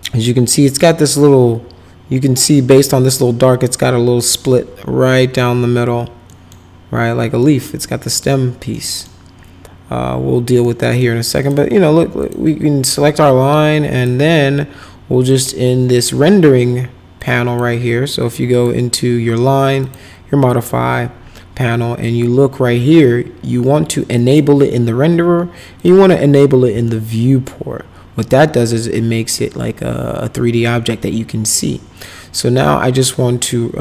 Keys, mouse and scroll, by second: 6.3 middle click, 7.4 middle click, 8.7 middle click, 10.6 middle click, 11.4 click, 12.2 click, 13.9 click, 15.3 click, 17.2 click, 18.5 click, 19.8 click, 24.2 click, 25.8 click, 26.8-30.6 alt+middle drag.